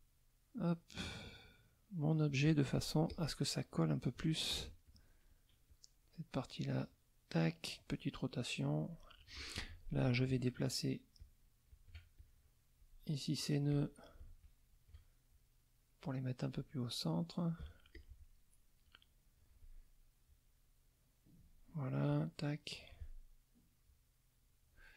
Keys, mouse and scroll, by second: 0.5-2.4 drag, 2.6 middle click, 3.4 middle click, 4.5 F1, 4.8 click, 5.7-6.7 drag, 6.8 click, 7.7-8.7 drag, 9.6 F2, 9.9 click, 10.5 shift+click, 11.1 shift+click, 11.7 shift+click, 12.1 shift+click, 13.7 click, 14.4 shift+click, 15.3-17.7 shift+drag, 17.9 click, 18.8 click, 20.2-21.6 drag, 22.1 click, 23.9-24.9 drag.